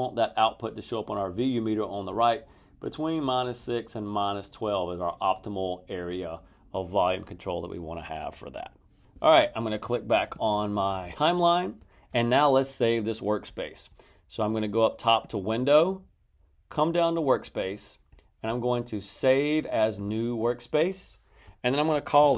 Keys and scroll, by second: 22.0-22.3 typing.